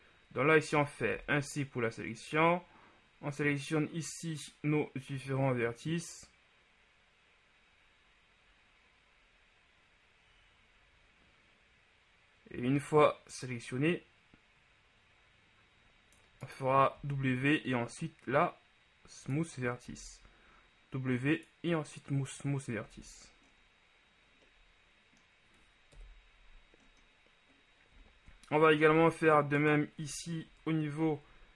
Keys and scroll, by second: 1.3 c, 17.3 w, 20.1 w, 23.1 Tab, 26.2 KP_1, 29.0 shift+Tab, 30.7 ctrl+KP_Add.